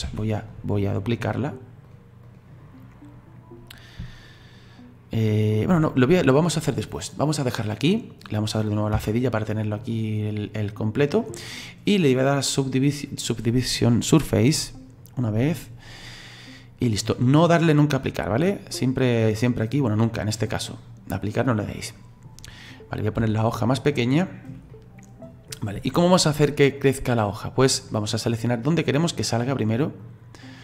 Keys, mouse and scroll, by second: 0.0 ctrl+z, 1.8-4.9 drag, 9.0 /, 9.3-9.9 scroll down 5, 9.9-12.3 middle drag, 12.3 click, 14.5-15.8 drag, 21.6-23.2 middle drag, 23.2 s, 24.7 middle click, 25.5-25.9 scroll up 2, 25.9 shift+middle click, 26.8-27.9 drag, 27.9-30.0 middle drag, 30.0-30.6 drag.